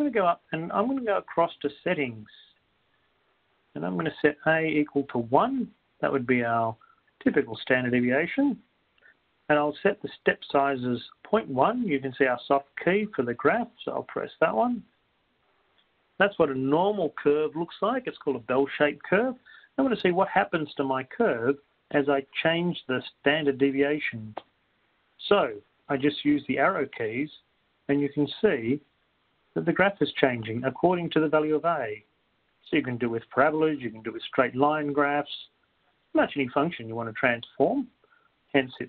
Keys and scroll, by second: 0.0-0.5 typing, 4.1 Down, 5.5 1, 6.5 Down, 8.0 Up, 8.0 ., 8.7 1, 25.5 Right.